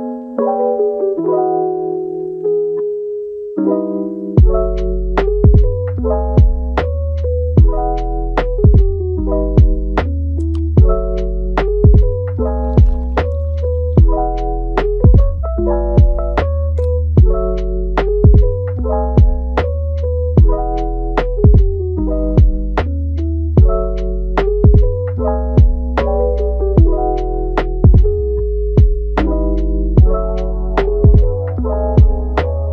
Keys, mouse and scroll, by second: 1.5-2.6 middle drag, 2.6 ctrl+t, 5.2 Tab, 5.5 scroll down 4, 5.8-7.9 middle drag, 7.9 scroll up 4, 8.2 Tab, 8.8 drag, 9.2 middle click, 9.6 g, 10.9 click, 12.4 click, 13.7 click, 16.6 scroll down 3, 16.8 Tab, 17.2-18.8 middle drag, 18.8 scroll down 2, 19.0 scroll up 4, 19.4 Tab, 20.7 click, 21.5 g, 22.2 click, 22.6 g, 23.4 click, 23.7 click, 24.2 g, 25.6 Tab, 25.7 scroll down 1, 25.9-27.0 middle drag, 27.0 scroll up 1, 27.1 scroll down 1, 27.6 scroll up 2, 28.1 g, 29.4-29.7 scroll up 4, 29.7 middle click, 30.0 Tab, 31.2 g, 32.0 Tab, 32.2 scroll down 3, 32.4-32.7 middle drag.